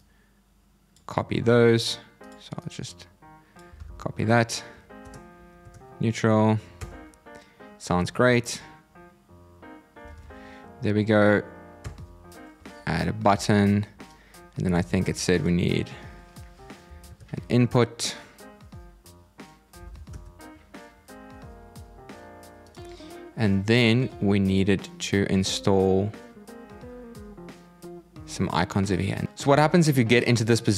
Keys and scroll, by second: 3.5 super+c, 9.8 super+v, 14.7 super+c, 19.5 super+v.